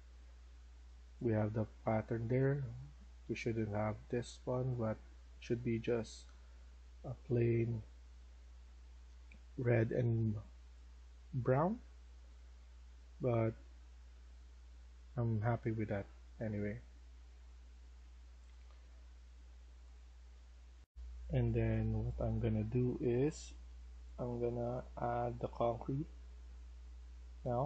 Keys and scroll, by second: 0.0-3.7 typing, 11.1-18.4 typing, 20.7 F1, 20.9-22.6 typing, 26.3 s, 27.3 w.